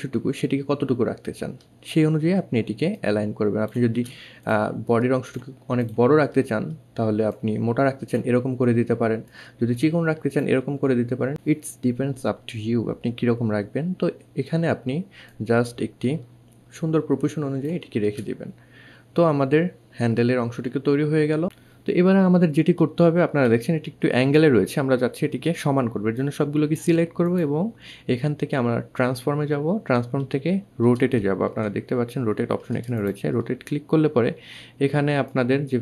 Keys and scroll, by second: 30.7 1.